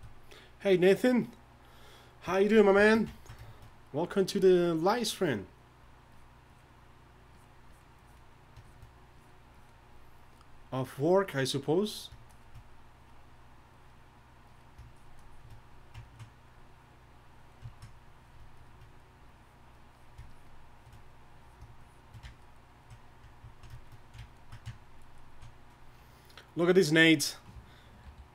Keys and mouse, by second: 4.7-9.8 drag, 16.1-18.8 drag, 18.9-24.4 drag, 28.0 alt+h.